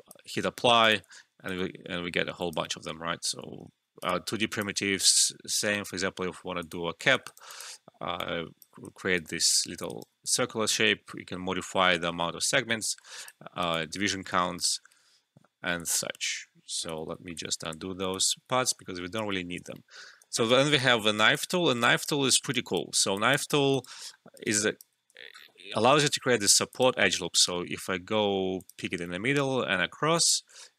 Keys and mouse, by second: 1.4-6.6 alt+drag, 6.1 typing, 7.2 alt+right click, 7.5 alt+click, 8.9 alt+middle click, 9.1 alt+right click, 9.4 alt+click, 9.9 alt+right click, 12.8 click, 13.7-15.7 alt+drag, 15.8 ctrl+z, 18.7 alt+middle click, 19.5 ctrl+z, 20.3 alt+right click, 20.7 ctrl+z, 21.3 click, 22.3 alt+middle click, 22.5 alt+right click, 23.1 alt+click, 23.4 alt+middle click, 23.7 alt+right click, 24.0 alt+middle click, 24.3 alt+right click, 24.3-25.5 typing, 24.5 alt+click, 25.2 alt+middle click, 26.7 click, 30.4 Return.